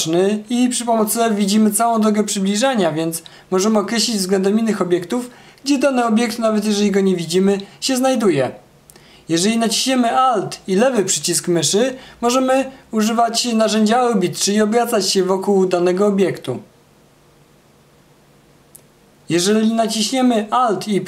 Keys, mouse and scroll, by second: 3.3 f, 7.2 f, 11.7-17.1 alt+drag, 20.2-21.0 alt+right drag.